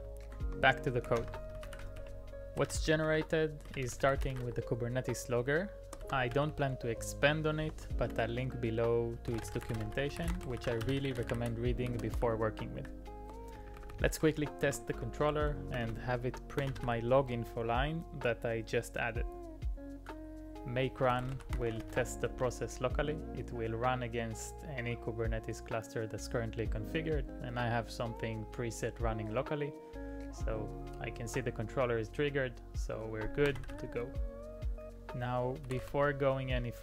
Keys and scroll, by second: 0.0 alt+i, 0.8-16.9 typing, 7.6 Return, 21.0-22.8 typing, 33.5 typing, 35.7 typing.